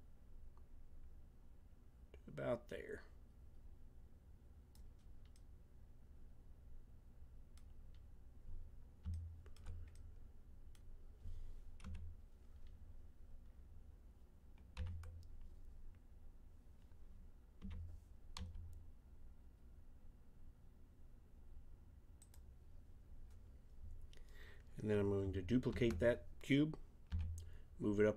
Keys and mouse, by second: 5.3 middle click, 10.0-11.8 middle drag, 11.8 KP_1, 13.3 middle click, 14.7 z, 17.6 g, 23.5-25.7 middle drag, 25.7 shift+d.